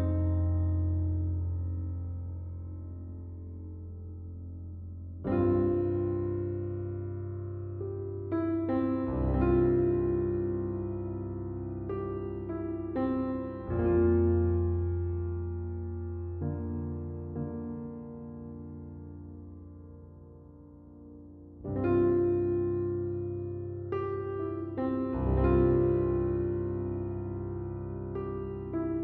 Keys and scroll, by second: 0.0-0.9 typing, 2.0 \, 2.5 \, 3.0 \, 4.6 \, 26.5 \, 27.0 \, 27.1 \, 27.7 \.